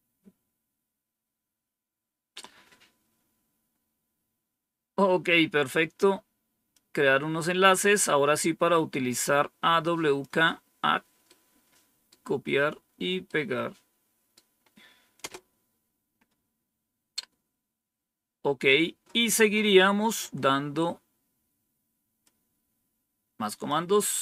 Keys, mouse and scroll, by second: 6.6-10.2 drag, 11.2 right click, 13.2 right click, 15.1 Return, 17.1-17.8 scroll down 2, 22.2-23.6 drag.